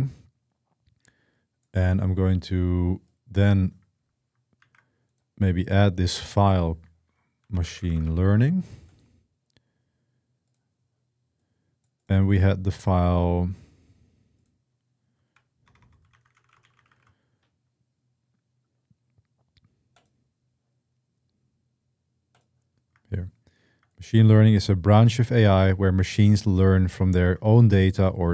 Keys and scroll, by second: 4.4 ctrl+z, 6.9-8.2 typing, 15.0-17.2 typing.